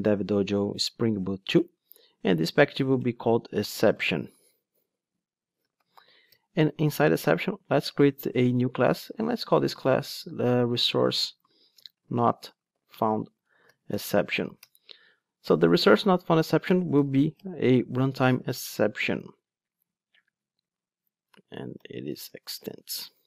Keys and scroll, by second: 7.2 super+n, 17.4 Return, 22.2 alt+BackSpace, 22.9 Return.